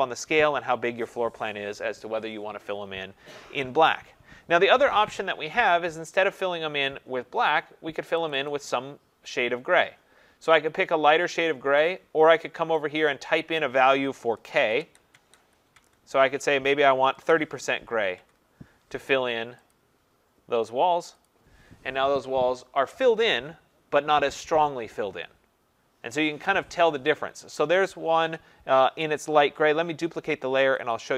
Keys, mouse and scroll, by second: 6.4 click, 8.3 click, 8.5 click, 11.8 click, 13.1 click, 14.6-17.6 typing, 14.8 Tab, 15.1 Tab, 15.8 Tab, 18.2 Tab, 19.7 click, 21.4 click, 30.9 click.